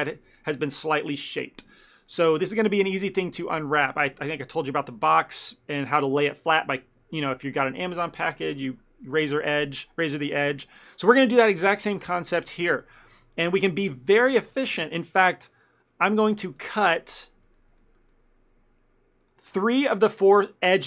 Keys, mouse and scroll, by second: 2.1 middle click, 2.4 ctrl+middle click, 2.8 middle click, 3.0 shift+middle click, 3.5 ctrl+middle click, 3.9 middle click, 12.6 click, 12.9 ctrl+middle click, 13.3 Tab, 13.5 middle click, 13.9 shift+middle click, 14.2 ctrl+middle click, 14.7 shift+middle click, 15.0 ctrl+middle click, 16.7 click, 17.1 middle click, 17.6 shift+middle click, 17.8 ctrl+middle click, 18.1 middle click, 19.3 ctrl+click, 19.7 middle click, 20.1 shift+middle click.